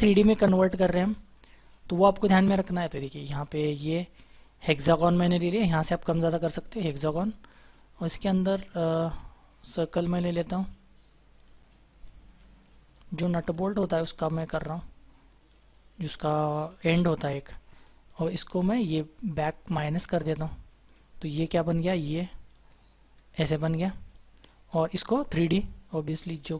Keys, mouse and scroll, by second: 0.8-1.3 scroll down 1, 1.3-1.6 scroll up 1, 6.3 double click, 13.7-14.1 scroll up 1, 14.6 shift+click, 16.2-18.0 scroll down 1, 18.0 double click, 23.1-23.7 scroll down 1, 24.8 scroll down 1, 24.8-26.2 scroll up 1.